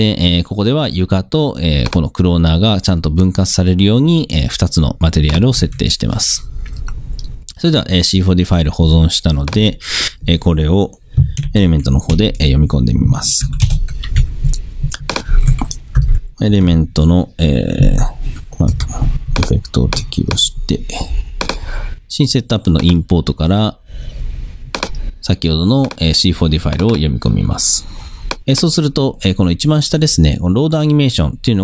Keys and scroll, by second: 5.7 super+s, 11.6 super+n, 12.2 super+Return, 12.8 Return, 13.5 super+y, 13.7 super+Return, 14.6 Return, 16.1-17.2 typing, 18.8 m.